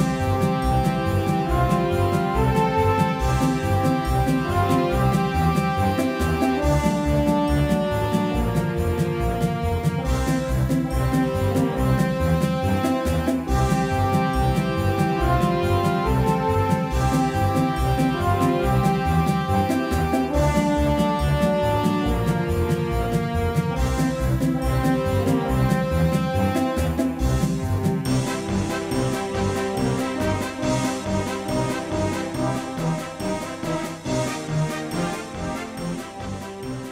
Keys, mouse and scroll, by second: 0.5 z, 2.6-9.0 right drag, 9.0-12.4 drag, 10.5-12.4 right drag, 12.4 ctrl+z, 13.1 click, 13.7-15.1 middle drag, 15.1 KP_5, 16.0 KP_5, 16.8 KP_1, 17.3 KP_3, 19.1 middle click, 20.6-22.9 right drag, 21.6-24.0 drag, 22.9 ctrl+z, 24.0-25.6 middle drag, 25.6 click, 30.8-32.8 middle drag, 32.1 KP_5, 32.6 KP_1, 33.4 KP_3, 34.1 KP_5, 35.4 middle click.